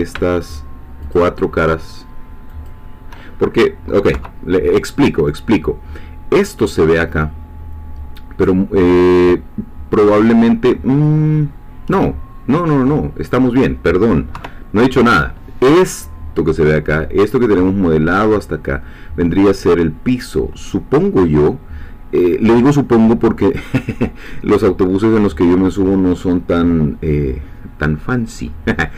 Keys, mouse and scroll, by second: 0.5 shift+click, 2.7 shift+click, 4.1 3, 10.9-13.8 middle drag, 14.4 KP_3.